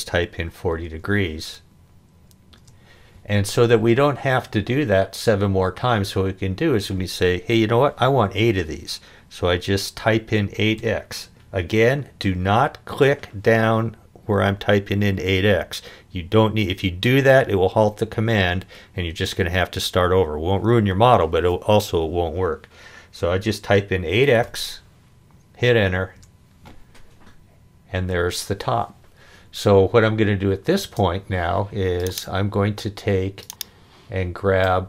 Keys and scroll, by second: 0.4 4, 1.4 0, 2.6 Return, 10.8 8, 24.4 x, 26.2 Return, 30.8 space.